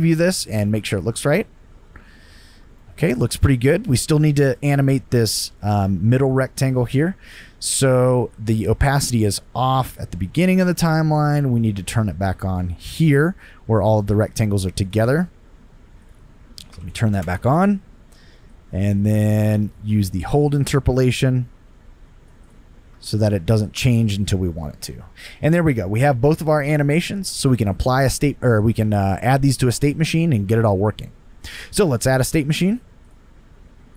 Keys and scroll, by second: 0.7 space, 2.6 space, 16.5-17.4 typing, 22.9 space.